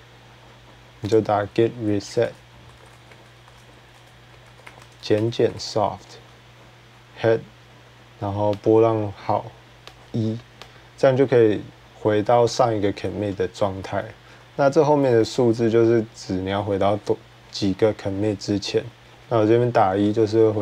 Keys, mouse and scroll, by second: 0.7 click, 3.8 typing, 6.3 typing, 9.2 typing, 15.1 Left, 15.1 click, 16.2 Right, 16.4 Right, 16.8 Right, 18.7 Left, 19.0 Left, 19.0 Right, 19.2 Right.